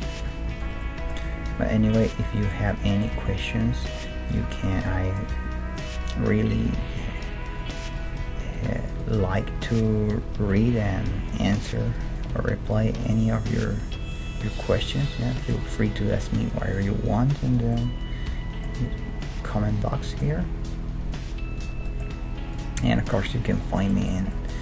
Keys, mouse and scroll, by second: 1.2 g, 2.4 middle click, 3.1 g, 4.5 click, 4.6 right click, 5.3 g, 6.3 middle click, 6.3 right click, 6.6-13.1 right drag, 6.9 g, 8.2 g, 9.2 g, 10.6 middle click, 11.1 g, 12.4 g, 13.1-16.4 middle drag, 13.5 g, 14.7 g, 16.2 g, 16.7-17.7 right drag, 16.9 g, 17.7-19.7 middle drag, 18.9 g, 20.1 middle click, 20.4 g, 21.8 middle click, 22.5-24.1 right drag, 22.8 g.